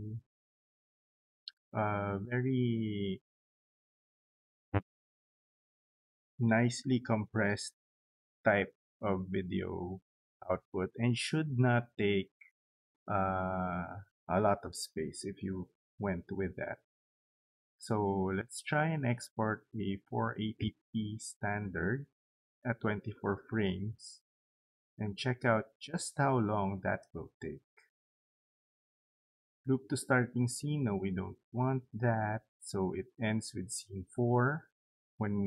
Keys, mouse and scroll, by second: 18.2 click, 20.2 click, 21.2 click, 23.1 click, 26.6 click, 30.2 click.